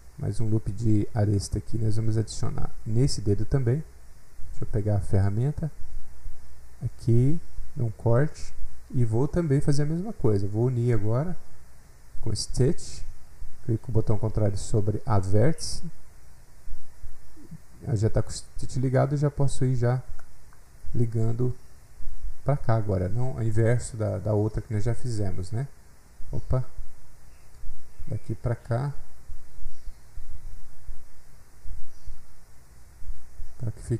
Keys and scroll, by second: 1.0 F8, 1.1 F8, 12.5 7, 23.5 7, 26.6 ctrl+z.